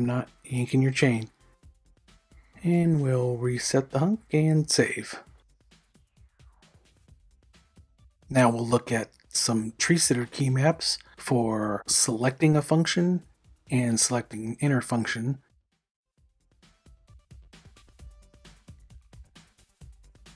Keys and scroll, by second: 1.7-2.8 typing, 4.3 \, 4.6 w.